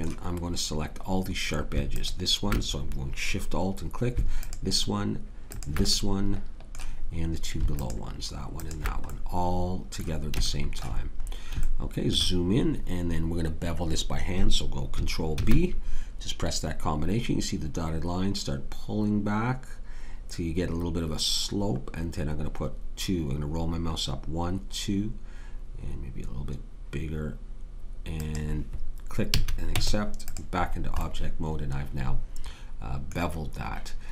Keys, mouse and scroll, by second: 9.1-11.2 drag, 15.3 ctrl+b, 29.3 a, 29.7 Tab.